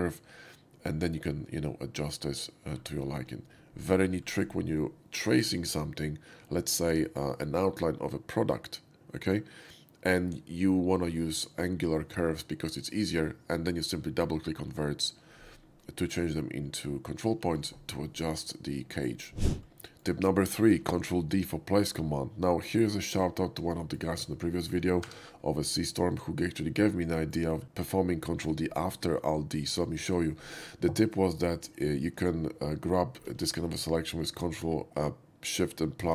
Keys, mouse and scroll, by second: 2.7 middle click, 3.0 middle click, 4.2 middle click, 19.6 shift+x, 19.7 shift+middle drag, 23.7 shift+middle drag, 24.2 scroll up 1, 24.5 shift+middle click, 25.0 3, 26.1 click, 26.4-26.8 middle drag, 27.0-27.3 shift+middle drag, 27.6 shift+middle click, 36.0 ctrl+shift+KP_Add.